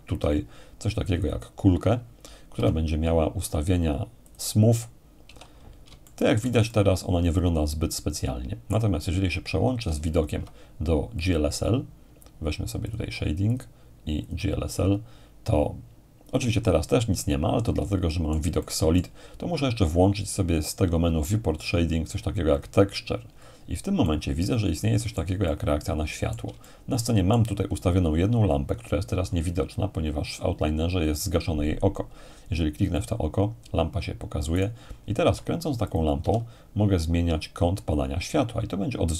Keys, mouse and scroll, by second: 1.2-2.2 drag, 2.5 t, 3.4-4.3 scroll down 2, 4.3-5.8 drag, 5.2 t, 6.0-9.7 shift+middle drag, 10.1-12.2 ctrl+drag, 12.9-15.3 drag, 17.1-21.0 middle drag, 19.9-21.0 drag, 22.5-23.6 drag, 24.0-28.3 middle drag, 33.0-34.0 drag, 34.6-35.6 right drag, 35.2 g, 35.9-36.9 drag, 36.2 r.